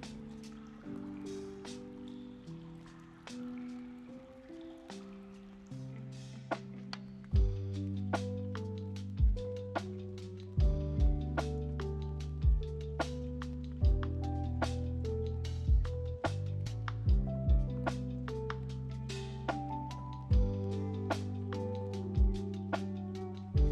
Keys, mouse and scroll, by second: 0.9-3.9 middle drag, 4.3 click, 6.5-9.9 middle drag, 9.9 click, 11.3 click, 12.3-14.4 middle drag, 14.4-14.9 scroll down 2, 15.1-16.5 middle drag, 16.5 click, 18.3 click, 18.6-21.7 middle drag, 22.0 shift+middle click, 22.3 click, 23.3 BackSpace.